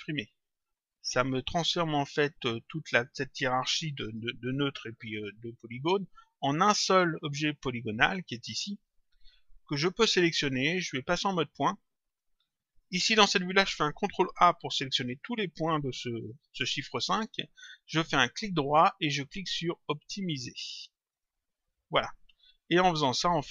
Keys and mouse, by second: 0.3 click, 9.5 click, 11.9 click, 18.3 right click, 21.1 click.